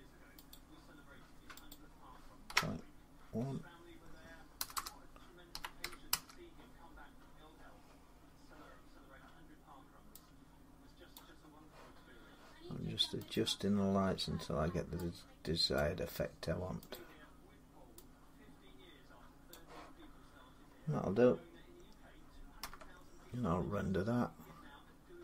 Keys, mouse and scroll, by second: 0.3 click, 1.5 click, 2.3 typing, 4.4-5.9 typing, 5.9 Return, 7.0 3, 10.9 click, 13.1 click, 15.6 click, 16.8 click, 19.3 click, 22.4 F12.